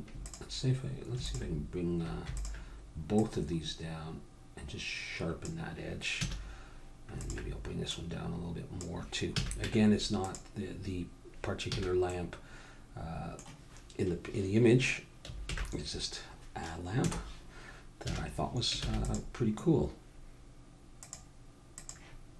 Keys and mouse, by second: 6.2 a, 7.2-9.9 drag, 9.3 a, 9.6 Tab, 11.7 a, 12.0 middle click, 15.5 alt+h, 17.0 KP_0, 18.0 a, 18.9 ctrl+s, 21.0 click, 22.3 click.